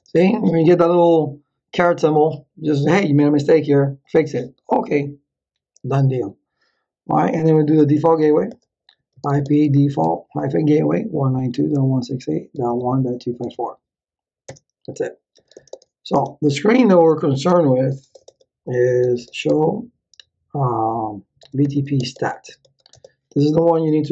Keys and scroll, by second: 7.3-14.0 typing, 14.5 Return, 15.1-16.3 typing, 17.0 ctrl+z, 17.5 Return, 18.7-19.7 typing, 21.1-23.1 typing.